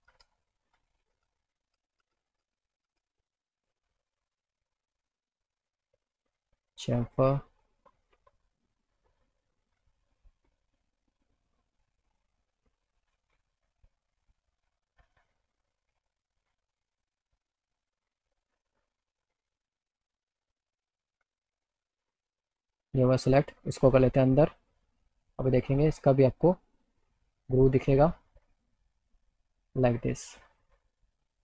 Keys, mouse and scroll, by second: 0.2 ctrl+z, 0.7 ctrl+z, 1.2 ctrl+z, 1.7 ctrl+z, 2.1 ctrl+z, 2.5 ctrl+z, 2.9 ctrl+z, 6.6 click, 9.2-11.9 drag, 14.1 click, 15.2 click, 16.8 click, 18.6 click, 20.5 middle click, 22.3 click, 23.4 click, 25.5 click, 26.8 click, 30.3 right click.